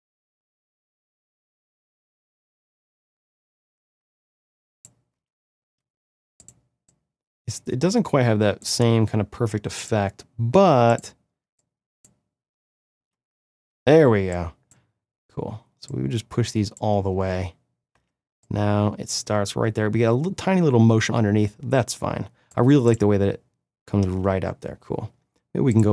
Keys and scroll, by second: 5.1 space, 12.9 space, 17.0 space, 22.8 space.